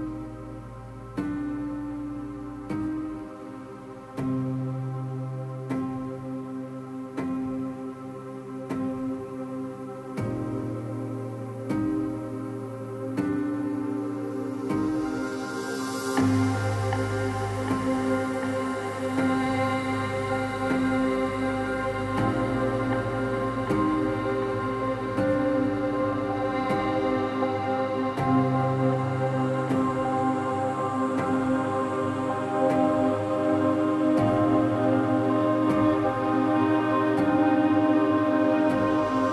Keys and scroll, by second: 10.1 ctrl+z, 10.4 ctrl+z, 11.6 ctrl+-, 11.8 ctrl+-, 12.2 ctrl+-, 12.4 ctrl+-, 12.6 ctrl+-, 23.9 ctrl++.